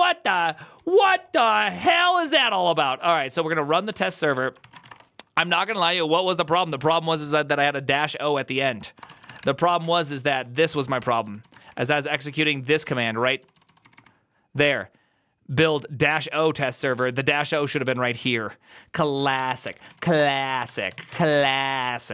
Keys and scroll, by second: 0.0-5.2 typing, 0.6 Return, 8.6-14.3 typing, 10.0 Return, 19.0-22.1 typing.